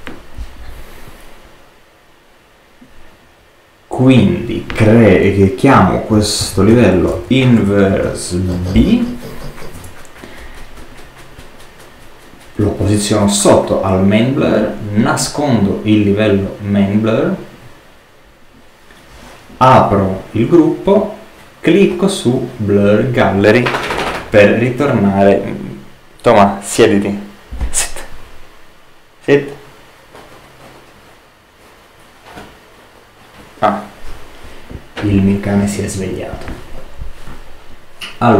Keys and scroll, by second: 5.8-8.5 typing, 9.7 shift+Return.